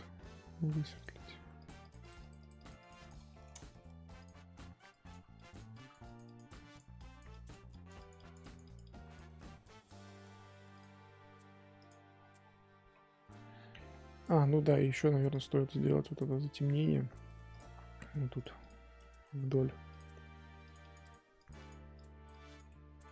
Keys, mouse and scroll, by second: 0.9-3.3 drag, 3.3 shift+middle click, 3.5-4.2 scroll up 3, 4.2 click, 4.9-10.8 drag, 11.7 click, 12.1-12.9 scroll down 8, 12.9-13.5 scroll up 3, 13.5-15.2 scroll up 7, 15.4 click, 15.5 middle click, 16.0-16.6 scroll down 2, 16.6-17.5 scroll up 3, 17.5 click, 18.4 click, 19.3 ctrl+z, 19.9 click, 20.6-22.6 drag, 22.6-23.1 middle drag.